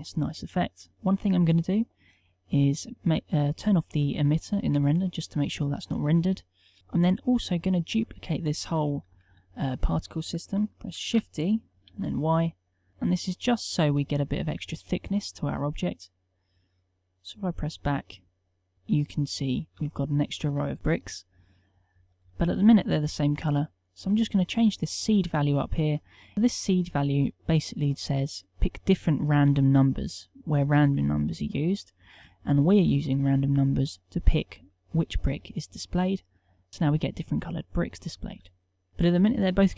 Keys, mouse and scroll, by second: 11.1 shift+d, 19.8 g.